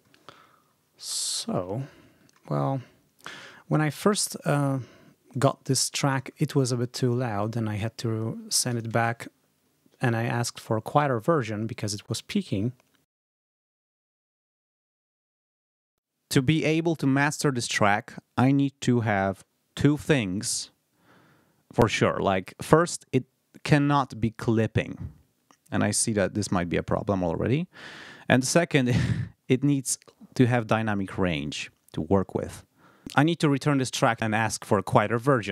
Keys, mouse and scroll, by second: 0.9 space, 1.2 ctrl+scroll down 2, 5.2 click, 6.2 ctrl+scroll up 2, 10.2-10.6 ctrl+scroll up 2, 11.1-11.4 ctrl+scroll up 2, 12.2-12.5 ctrl+scroll up 2, 33.0-34.1 drag.